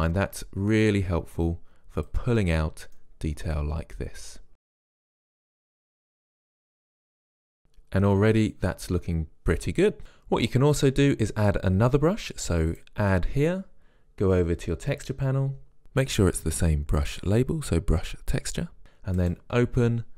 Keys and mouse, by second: 0.1-2.1 drag, 2.5-3.7 middle drag, 3.7-4.9 drag, 4.9 middle click, 5.2-6.4 drag, 7.0-10.7 middle drag, 14.6 click, 19.3 click.